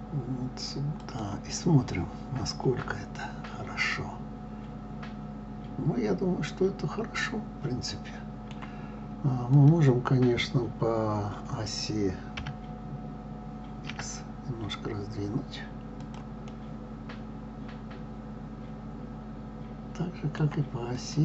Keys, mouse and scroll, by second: 1.8-4.8 middle drag, 9.4 click, 12.4 s, 16.5-19.4 middle drag, 20.8 click.